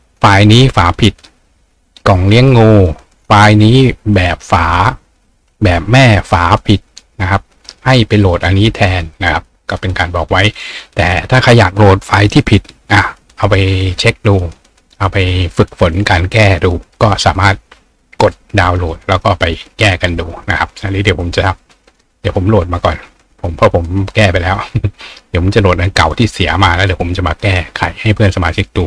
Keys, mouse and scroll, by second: 16.2 click, 20.9 click.